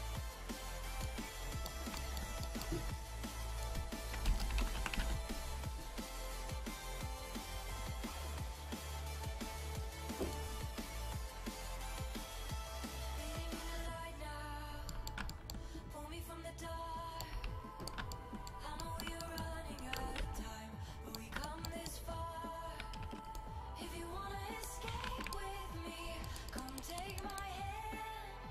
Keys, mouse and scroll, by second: 0.9 x, 1.5 middle click, 2.3 click, 2.5 middle click, 3.4-5.5 drag, 6.6-12.9 drag, 14.3-17.3 drag, 14.9-17.3 middle drag, 17.3 g, 18.2-19.5 middle drag, 20.2 alt+h, 22.6 click, 23.1 ctrl+Tab, 25.1 ctrl+Tab.